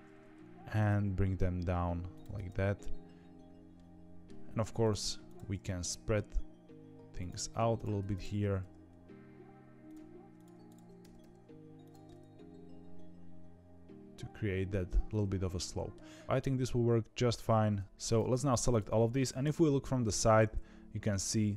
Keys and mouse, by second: 0.7 g, 2.3 middle click, 3.7 middle click, 4.7 click, 5.6 g, 8.3 g, 10.3 click, 12.0-14.8 middle drag, 15.2 middle click, 17.8 2, 18.0 click, 18.0 z, 19.4 KP_3, 20.0 z.